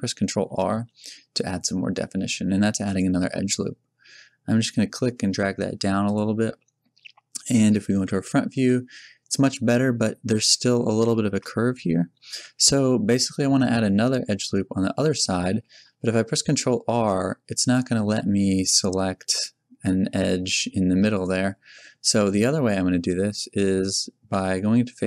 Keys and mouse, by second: 0.3 a, 0.9 ctrl+r, 6.2 click, 8.5 KP_1, 10.4 z, 12.4 z, 15.5 a, 16.0 ctrl+r, 21.8-23.1 drag, 23.5 click.